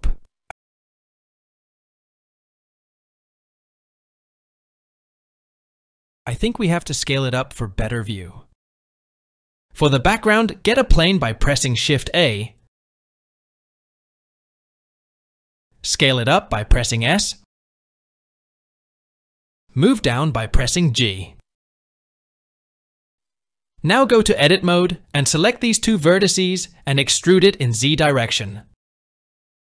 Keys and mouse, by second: 4.8 click, 6.1 s, 9.7 shift+c, 11.2 click, 12.2 shift+a, 17.6 s, 20.1 g, 23.1-24.2 middle drag, 24.8 Tab, 25.7-26.7 drag, 27.6 e.